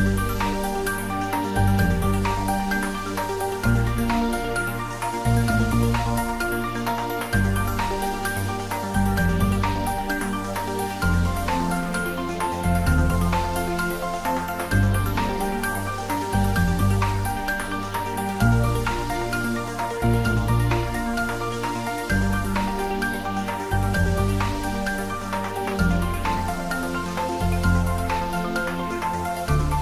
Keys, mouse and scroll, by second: 1.2 click, 3.6-9.9 drag, 13.7 Tab, 16.9-19.0 scroll up 1, 19.5-19.9 scroll up 1, 21.8-23.8 scroll down 1, 25.8 Tab, 29.7 click.